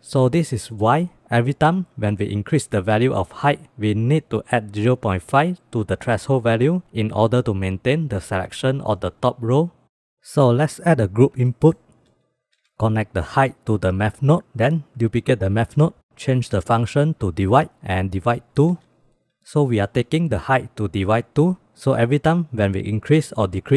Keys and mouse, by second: 2.2 click, 10.6 shift+a, 15.0 shift+d, 16.3-17.4 drag, 18.2-19.3 drag, 19.5-20.1 drag, 20.5-22.7 drag.